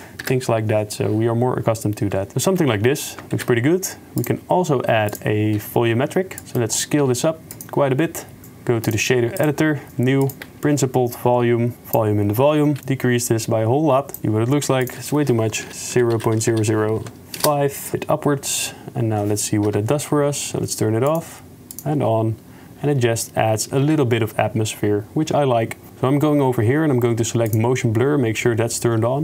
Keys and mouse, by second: 0.3 KP_0, 3.4 shift+a, 6.4 s, 6.6 click, 7.2 s, 8.9-9.4 drag, 10.5 x, 10.5 shift+a, 11.9 click, 12.8 shift+middle click, 13.1 shift+click, 13.4 shift+middle click, 14.2 KP_0, 15.0-17.4 drag, 16.5 0, 19.7 KP_Decimal, 21.1 click, 21.7 click, 23.9 ctrl+s, 27.5 click.